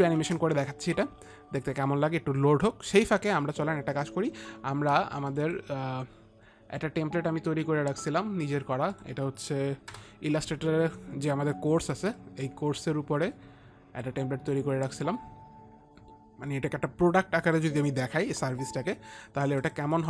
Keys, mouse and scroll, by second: 0.7 click, 0.7 space, 3.9 space, 5.8 click, 9.4 click, 10.4 Return, 12.4 click.